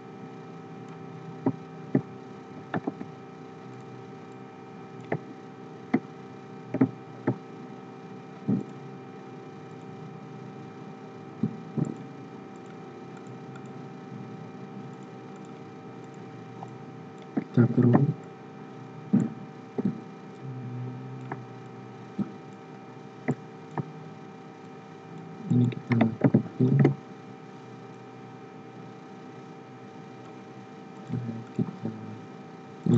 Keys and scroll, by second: 17.7 ctrl+g, 26.2 ctrl+c, 26.7 ctrl+f.